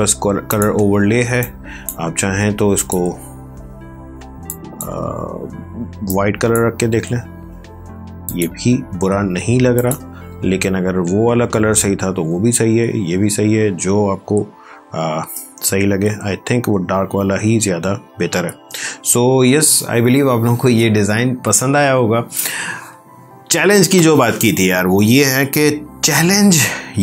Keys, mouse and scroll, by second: 1.4 click.